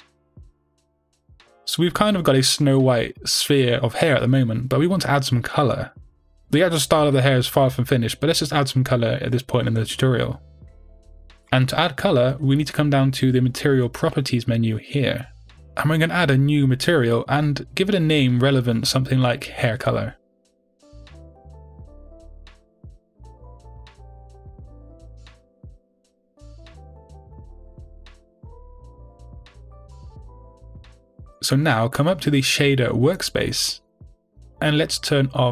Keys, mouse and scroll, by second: 0.6 click, 1.2-6.3 middle drag, 7.2-11.2 middle drag, 14.7-17.4 middle drag, 17.4 click, 22.9-35.5 drag, 29.9 Return.